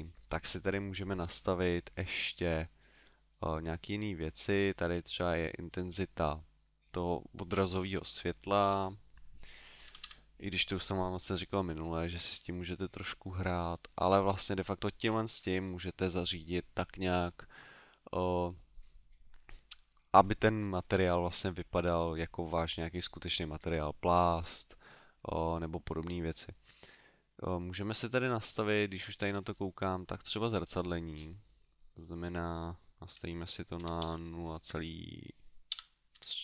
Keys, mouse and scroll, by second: 1.6 middle click, 3.3 click, 4.4 click, 4.9 click, 5.4 click, 8.4 click, 11.6-13.4 scroll down 2, 13.5 scroll down 2, 15.3-17.0 scroll down 7, 29.5 click, 30.2 click, 30.6-31.1 scroll down 3, 31.9 click, 31.9 scroll down 3.